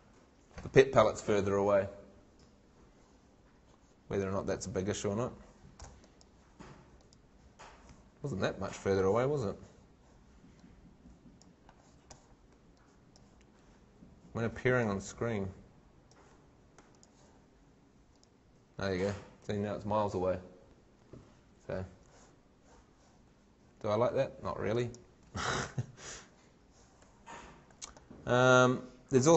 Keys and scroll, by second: 5.1 shift+Escape, 23.9 shift+Escape.